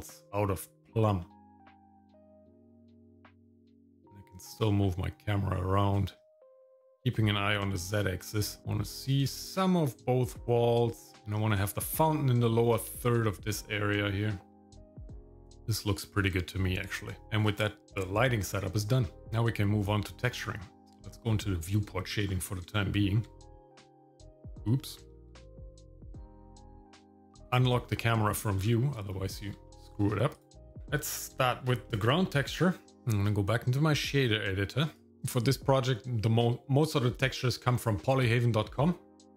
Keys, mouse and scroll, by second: 1.2-3.9 middle drag, 8.6-11.4 middle drag, 11.4 click, 11.4 right click, 20.9 click, 22.2-22.6 scroll down 2, 22.7 shift+middle click, 23.7 shift+middle click, 25.2 ctrl+z, 25.7 ctrl+z, 27.4 click, 28.6 scroll down 2, 29.1 shift+middle click, 29.7 middle click, 30.3 click, 30.7 shift+middle click, 30.8 shift+KP_Decimal, 31.0-31.3 scroll up 2, 31.4 shift+middle click, 31.9 middle click, 32.5-33.0 scroll down 1, 33.0 shift+middle click, 34.1 click.